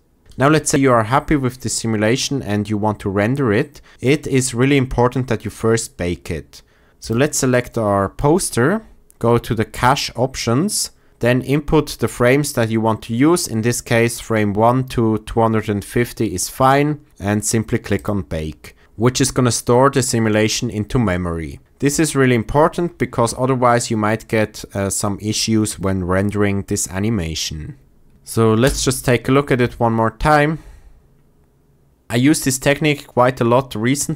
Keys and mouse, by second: 7.7-9.9 drag, 17.9 click, 28.6 space.